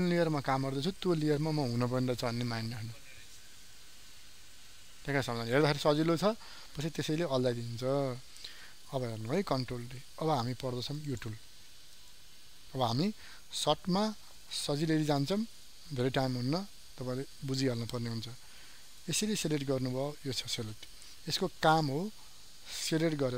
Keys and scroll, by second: 8.1 ctrl+z, 9.5 ctrl+d.